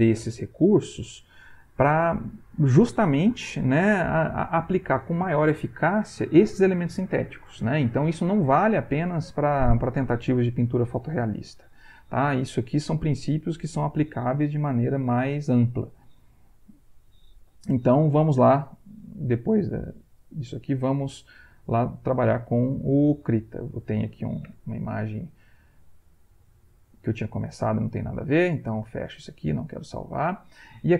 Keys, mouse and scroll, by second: 16.5 Right, 18.7 alt+Tab, 22.2 alt+Tab, 24.5 ctrl+w, 29.4 click.